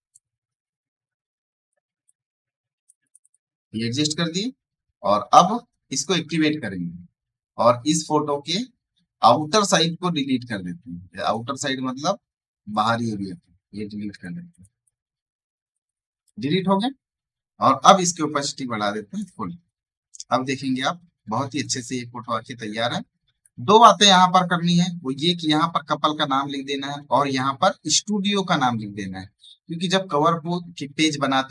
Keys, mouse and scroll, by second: 0.6 ctrl+z, 1.0 click, 2.0 ctrl+click, 5.8 ctrl+click, 11.1 ctrl+click, 18.7-20.1 drag, 20.1 alt+scroll down 1, 21.1 click, 21.4 space, 21.5 right click, 21.7 click, 22.4 alt+scroll down 1, 23.0 right click, 23.3 click.